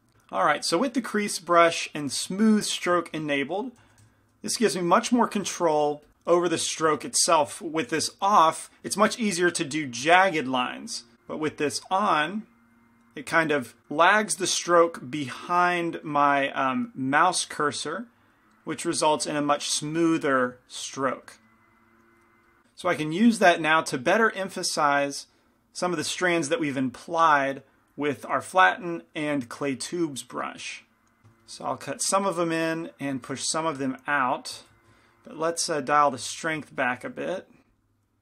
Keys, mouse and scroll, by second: 0.5-3.3 middle drag, 4.0 shift+c, 4.2 shift+f, 5.6 f, 7.2-9.5 middle drag, 11.6-20.2 drag, 20.2-22.6 middle drag, 22.8-24.6 middle drag, 24.6-26.5 drag, 30.4 middle click, 31.2 f, 33.1-36.3 drag, 36.3 ctrl+z, 37.0 shift+f, 38.0-38.2 drag.